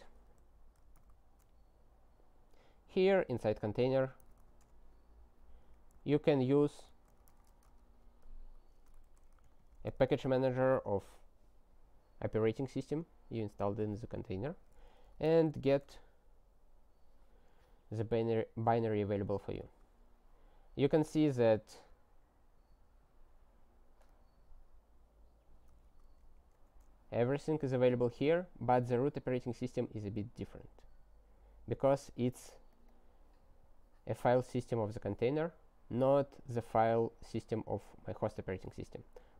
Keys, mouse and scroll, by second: 0.0-0.9 typing, 1.0 Return, 4.0 g, 4.3 i, 4.7 Return, 5.3-10.1 typing, 10.1 ctrl+e, 10.3 Return, 14.8-15.8 typing, 15.9 Return.